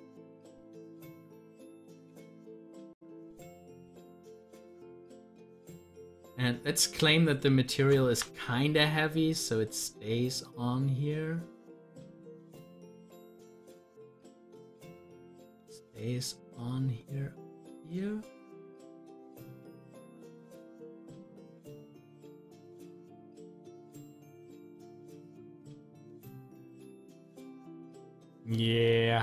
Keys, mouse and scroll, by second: 2.3 double click, 4.6-8.0 drag, 8.0 z, 8.9-14.4 drag, 14.4 ctrl+z, 22.8 click, 23.1 double click, 24.5 click, 26.8 click, 28.2 click.